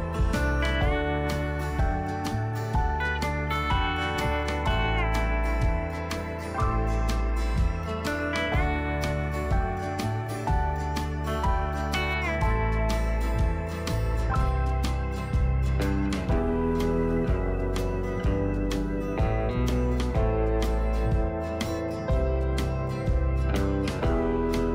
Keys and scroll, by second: 6.3 ctrl+d.